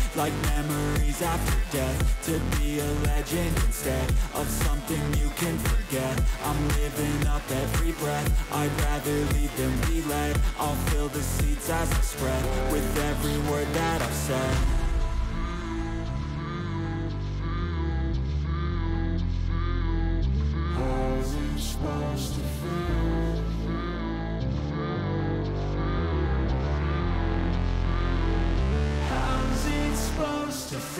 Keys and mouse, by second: 1.1 click, 1.4 click, 2.1 alt+click, 3.1 alt+shift+click, 4.1 click, 4.9 click, 5.4 alt+shift+click, 5.7 alt+shift+click, 6.1 click, 7.4 shift+click, 8.4 click, 8.9 click, 10.0 ctrl+click, 11.6 click, 13.6-14.8 drag, 15.6 click, 16.3 click, 18.1 click, 19.4 click, 20.1 click, 21.5-23.0 drag, 25.3-26.5 drag, 27.9 click, 28.7 click, 29.8-30.9 drag.